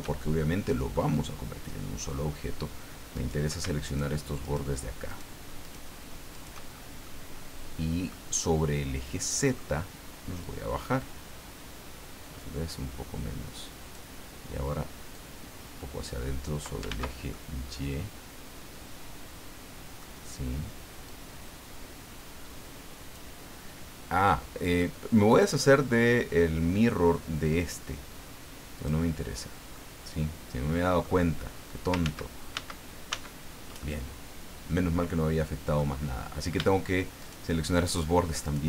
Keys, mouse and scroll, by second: 0.9-2.2 middle drag, 2.4 scroll up 1, 3.1 right click, 3.8 shift+right click, 4.4 shift+right click, 5.1 shift+right click, 5.6 shift+right click, 6.3 shift+right click, 6.7 shift+scroll down 2, 7.0-8.2 middle drag, 8.4-9.7 middle drag, 10.4 click, 11.4-11.9 scroll up 2, 12.0 scroll up 2, 15.1-16.8 drag, 16.9 ctrl+z, 17.3-20.1 ctrl+middle drag, 21.0-23.3 drag, 28.7 click, 29.7-31.2 middle drag, 32.0 ctrl+z, 33.8-35.9 ctrl+middle drag, 36.0-36.5 scroll up 2, 37.2 shift+right click, 37.8 shift+right click, 38.4 shift+right click.